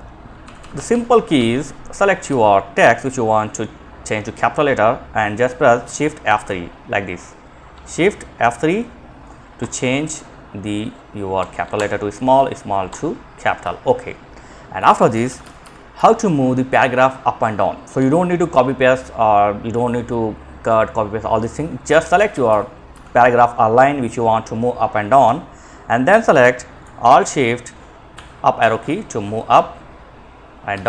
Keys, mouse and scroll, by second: 0.0 ctrl+shift+Right, 5.4 F3, 14.0 Left, 14.1 Down, 14.3 Down, 14.4 Down, 14.6 Down, 21.1 shift+Down, 21.4 shift+Down, 21.5 shift+Down, 21.7 shift+Down, 27.3 alt+shift+Up, 27.8 alt+shift+Up, 30.0 Down, 30.1 Down.